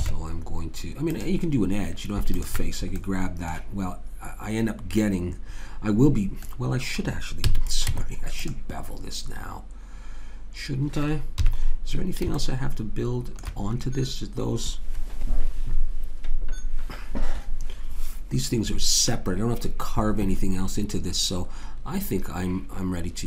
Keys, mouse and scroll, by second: 0.0 ctrl+Tab, 2.3 click, 6.4-7.4 middle drag, 7.4 a, 7.9 Tab, 7.9 middle click, 11.3 KP_3.